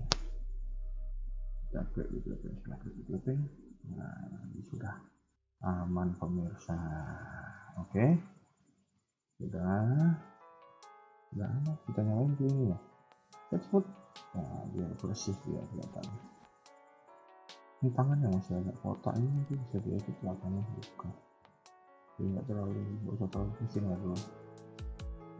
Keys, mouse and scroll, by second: 0.0-1.3 scroll up 2, 1.3 g, 5.3 scroll down 2, 5.6 middle click, 6.9 scroll up 2, 7.0 KP_1, 7.5 shift+middle click, 7.8 scroll up 1, 8.0 middle click, 10.2 KP_1, 10.3 KP_3, 10.7 scroll down 2, 10.7 KP_1, 11.0 Tab, 12.2 click, 13.3 scroll down 1, 13.6 scroll up 2, 14.1 middle click, 15.2 KP_1, 15.9 scroll down 2, 16.2 middle click, 20.2 KP_1, 20.6 scroll up 1, 20.7 Tab, 21.5 shift+middle click, 22.0 middle click, 23.1 KP_1, 24.2 middle click.